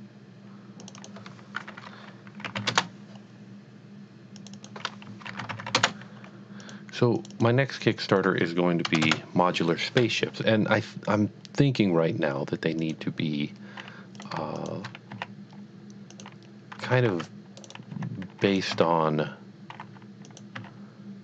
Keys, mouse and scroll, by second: 0.9 click, 1.0 double click, 1.2 double click, 1.7-2.6 typing, 2.7 Return, 4.4 click, 4.5 double click, 5.1-5.7 typing, 6.4 Return, 6.7 click, 7.2 click, 7.3 double click, 7.8 click, 8.2 click, 8.9 BackSpace, 10.4 Return, 12.8 click, 14.2 click, 14.6 shift+click, 15.2 s, 16.2 click, 16.8 alt+a, 17.1 c, 17.3 click, 17.6 right click, 18.0 s, 18.5 click, 18.7 e, 20.0 z, 20.3 click, 20.6 s.